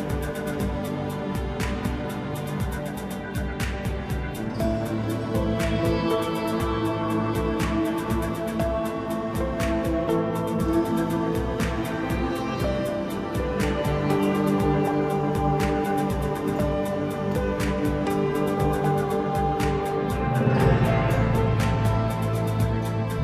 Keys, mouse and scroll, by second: 0.1 KP_1, 1.7 click, 2.1-2.5 scroll up 1, 2.5 scroll down 2, 2.8-4.9 middle drag, 4.9 click, 6.5 click, 6.8-7.7 scroll down 1, 7.7 click, 8.6 drag, 9.2-10.7 middle drag, 10.7 KP_1, 11.7 ctrl+alt+KP_0, 13.2-14.2 scroll down 6, 14.2 drag, 14.5-15.6 scroll down 2, 15.6-18.3 drag, 18.3 scroll up 3, 18.5 scroll down 2, 18.7-20.8 middle drag, 20.8 KP_1, 21.7-22.2 scroll up 1, 22.2-23.2 scroll down 1.